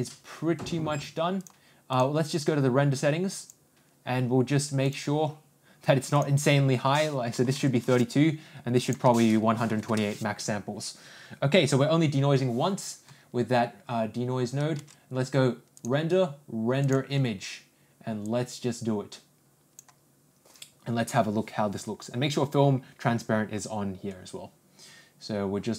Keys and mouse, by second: 1.9 click, 6.3-8.2 drag, 8.9-10.6 drag, 15.7-18.2 ctrl+drag.